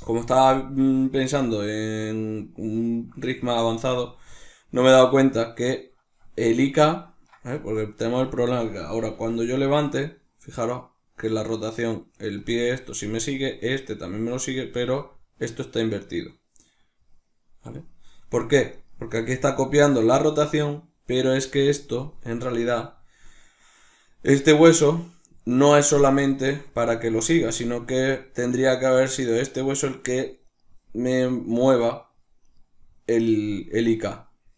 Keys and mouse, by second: 6.4 right click, 7.2 right click, 8.2 right click, 9.0 r, 12.3-13.5 drag, 13.5 right click, 14.3 right click, 14.6 r, 19.1 right click, 19.7 right click, 22.7 right click, 28.4-30.4 ctrl+middle drag, 30.4 right click, 31.7 right click, 32.4 right click.